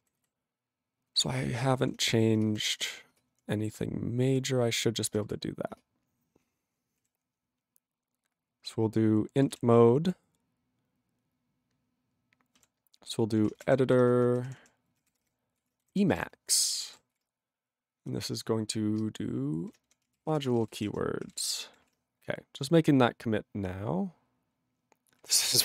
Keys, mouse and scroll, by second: 25.3 q.